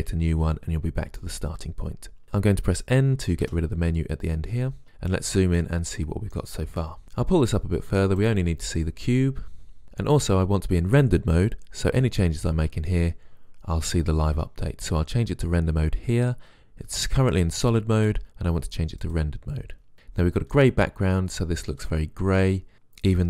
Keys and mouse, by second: 3.6 n, 7.9 click, 16.3 click, 20.1-22.0 middle drag.